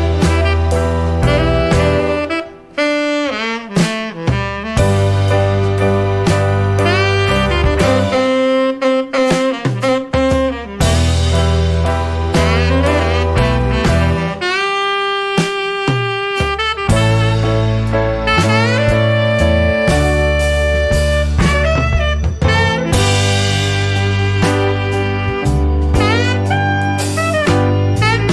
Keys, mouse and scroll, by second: 1.3-1.9 scroll up 1, 2.3-3.0 scroll down 2, 3.5 scroll up 2, 4.1 1, 5.8-6.2 scroll up 2, 7.3-7.6 scroll down 2, 8.5 scroll down 2, 9.3 scroll up 2, 10.0-10.3 scroll down 2, 10.7-11.2 scroll up 4, 12.3 1, 13.3 2, 14.3-14.6 scroll down 2, 15.2 scroll up 2, 15.7-16.1 scroll down 2, 16.4-16.9 scroll up 2, 17.2 scroll up 2, 19.3 3, 23.0 4, 25.0 5, 25.7-26.3 scroll down 1, 26.5 scroll up 1, 27.6 6.